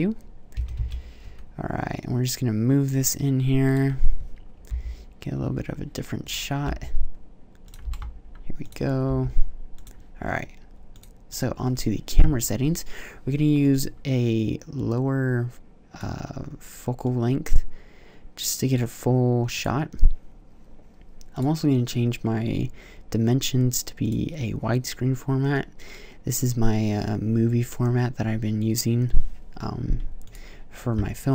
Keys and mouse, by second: 0.4 g, 3.5-6.5 drag, 6.5 g, 7.5 click, 7.7 g, 8.9 g, 14.1 click, 16.8 click, 19.4-21.2 drag.